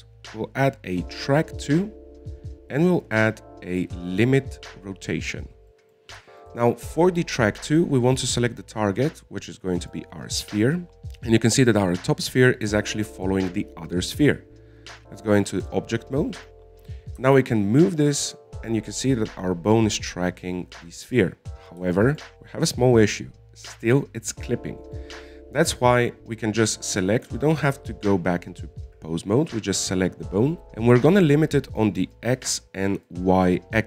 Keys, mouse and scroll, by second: 4.1-7.1 drag, 7.1-9.4 middle drag, 9.4 click, 11.0-13.0 middle drag, 16.3-17.8 drag, 17.8 right click, 18.6 g, 22.8-23.3 scroll down 2, 23.3 shift+middle click, 23.7-26.2 scroll up 1, 26.2 right click, 33.4 click.